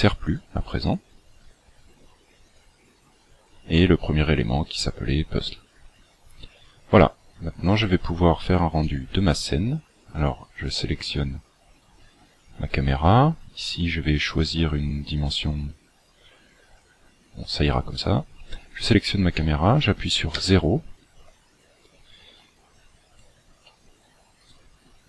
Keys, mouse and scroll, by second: 2.4 click, 8.7 right click, 10.1 click, 11.4-11.9 scroll down 4, 20.3 KP_0, 22.5-22.9 scroll down 2, 22.9 scroll up 3, 24.4 right click.